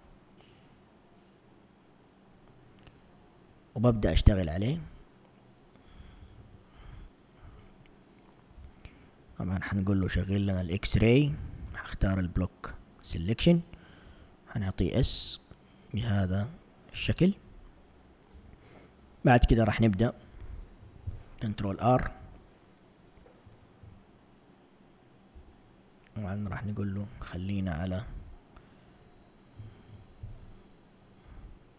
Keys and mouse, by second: 4.5 Tab, 6.3 b, 8.7 a, 10.3 click, 11.8 b, 14.1 s, 18.5 a, 20.9 ctrl+r, 28.3 click, 30.0 ctrl+r.